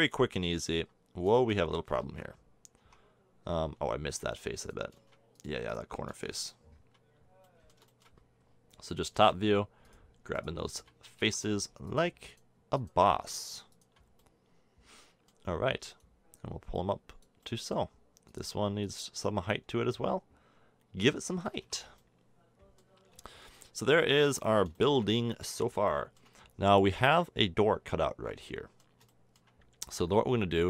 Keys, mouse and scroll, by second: 2.0 ctrl+z, 2.8 Tab, 8.0 middle click, 11.1 ctrl+z, 19.2-20.6 middle drag, 21.5 a, 21.6 Tab, 26.4-28.6 middle drag.